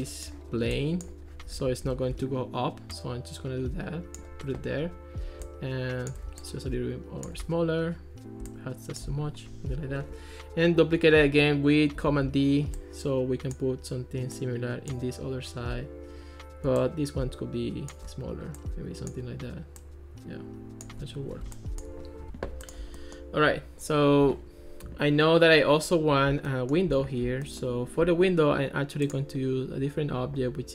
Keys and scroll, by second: 2.0 ctrl+x, 12.1 super+d.